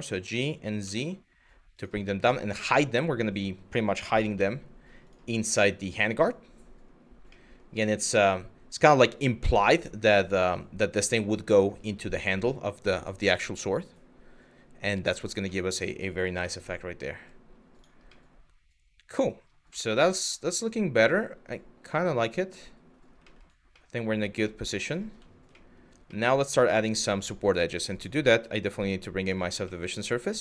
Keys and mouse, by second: 0.5 z, 1.4 click, 1.8-3.2 middle drag, 3.7 g, 4.0 z, 4.7 click, 5.0-6.5 middle drag, 6.9 middle click, 9.1 click, 9.7 Tab, 15.2 middle click, 16.0 z, 17.8-18.9 middle drag, 19.4-22.6 middle drag, 22.9 shift+middle drag, 23.4-23.7 middle drag, 24.0 middle drag, 25.2 shift+middle drag, 25.7-26.1 middle drag, 26.5 shift+middle click, 27.3 click, 27.5-28.9 drag, 29.4-30.1 middle drag.